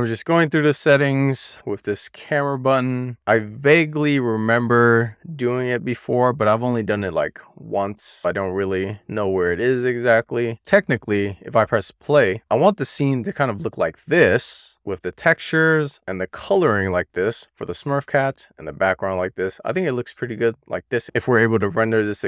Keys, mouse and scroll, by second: 1.7-3.2 scroll down 2, 3.6 click, 4.6 click, 5.1 drag, 5.6 click, 5.9 drag, 6.2 click, 7.3-8.0 scroll up 1, 8.0-9.7 scroll down 1, 12.5 click, 14.5-15.3 shift+middle drag, 16.1 scroll up 1, 17.1 middle click, 17.8-18.9 shift+middle drag, 19.8-20.1 scroll down 1, 21.1 click.